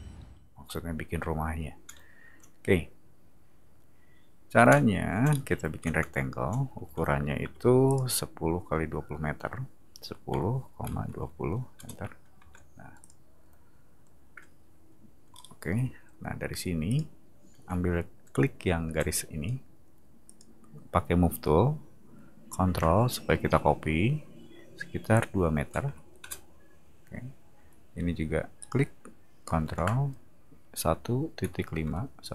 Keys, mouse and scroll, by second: 5.2 middle drag, 7.4 r, 7.9 click, 10.0 1, 10.3 0, 10.8 ,, 11.7 Return, 12.4 space, 13.0 click, 15.3 middle click, 16.9 click, 18.9 m, 20.2 click, 25.8 2, 26.2 Return, 28.6 click, 30.9 1, 31.8 5.